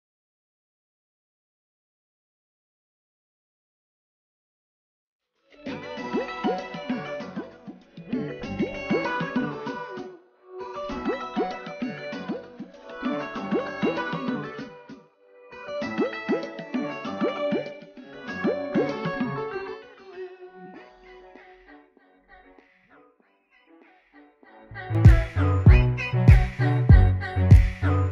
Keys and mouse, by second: 6.6 click, 9.0 click, 11.8 click, 15.0 click, 22.8 click, 25.6 click, 27.2 click.